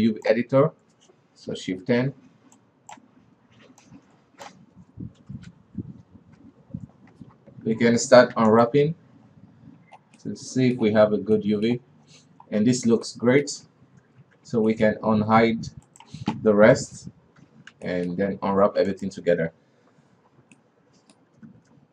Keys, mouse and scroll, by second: 0.0-2.0 drag, 2.0 shift+F10, 2.1 shift+F10, 3.0-3.4 drag, 4.3-5.7 drag, 5.7 shift+F10, 5.8 shift+F10, 6.8 shift+F10, 8.0 a, 8.8 u, 9.7-10.7 scroll up 5, 10.7-12.4 middle drag, 12.4-12.9 scroll down 1, 12.9-13.5 scroll up 2, 13.5 middle click, 14.5 ctrl+v, 17.9 alt+h, 18.3 middle click, 18.6 a, 19.3 u, 21.0-21.9 middle drag.